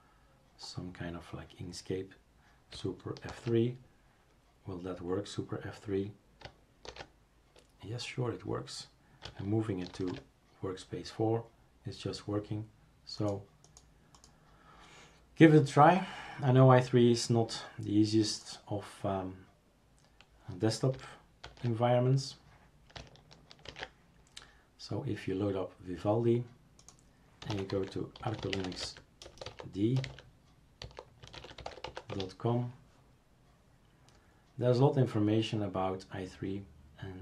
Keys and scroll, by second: 3.3 super+F3, 6.9 super+f, 21.4 super+é, 23.7 ctrl+alt+v, 27.2-32.3 typing.